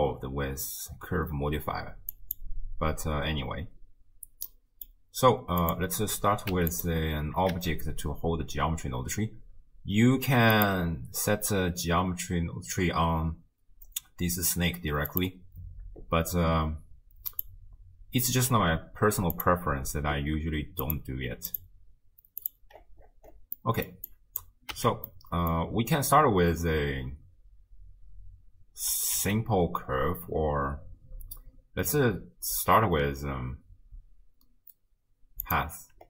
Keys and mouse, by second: 2.2 click, 4.5-4.9 middle drag, 5.6 click, 6.5 x, 7.5 shift+a, 17.3 click, 19.4 click, 20.9 click, 21.6-22.5 drag, 23.6 click, 24.1 click, 24.8 x, 25.1 click, 29.2 shift+a.